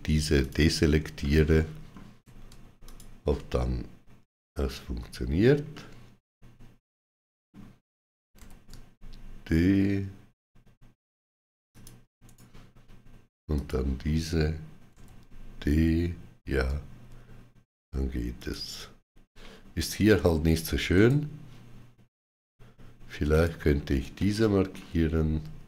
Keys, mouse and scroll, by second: 0.2 ctrl+click, 1.0 shift+middle click, 2.6 ctrl+click, 5.6 shift+middle click, 8.2 d, 11.5 shift+click, 12.1 right click, 13.4 shift+click, 14.8 d, 17.0 click, 17.0 right click, 17.0 shift+d, 18.2 shift+click, 20.7 right click, 23.1 shift+click, 24.0 shift+middle click.